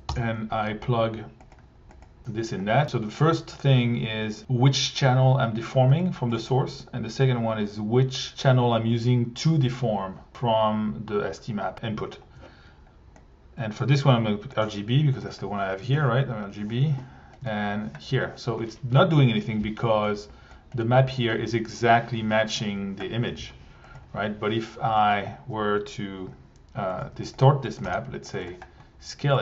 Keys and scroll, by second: 0.1 Return, 15.2 1, 16.0 alt+1, 17.4 1, 20.8 1, 23.9 1, 27.0 1, 27.8 t.